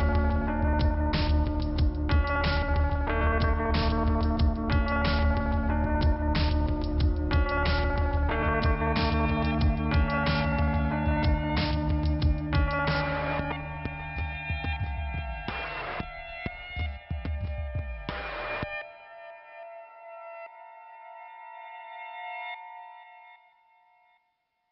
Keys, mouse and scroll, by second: 2.1 click, 3.8 click, 8.9 click, 9.8 click, 11.2 scroll down 2, 12.7 click, 14.5 Return, 15.2 click, 16.3 click, 17.0 click, 17.4 right click, 18.9 click, 19.6 click, 20.6 click, 21.1 click, 21.7 click, 22.0 click, 22.5 click, 23.2 click, 24.3 scroll up 1.